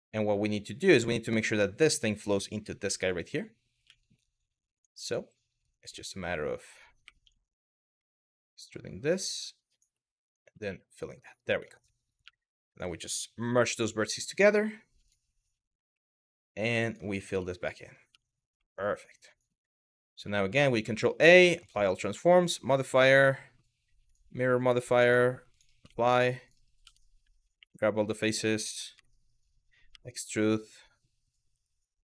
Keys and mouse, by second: 2.5 1, 2.8 click, 3.5 g, 4.4 click, 6.7 2, 7.6 e, 8.8 click, 9.4 click, 9.9 shift+click, 10.3 f, 10.9 click, 11.9 1, 12.3 click, 14.7 click, 15.5 2, 16.9 f, 17.8 Tab, 18.3 middle click, 20.5 ctrl+a, 21.9-23.8 drag, 24.6-25.3 drag, 25.6 shift+middle click, 26.1 click, 26.5 Tab, 27.2 3, 27.8 middle click, 28.6 a, 29.6 e.